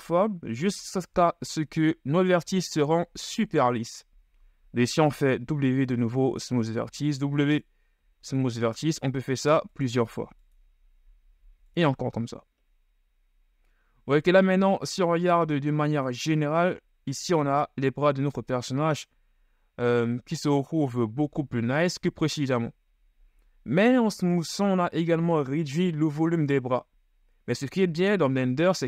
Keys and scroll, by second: 5.7 w, 8.7 w, 9.4 w, 14.6 Tab, 21.1 KP_1.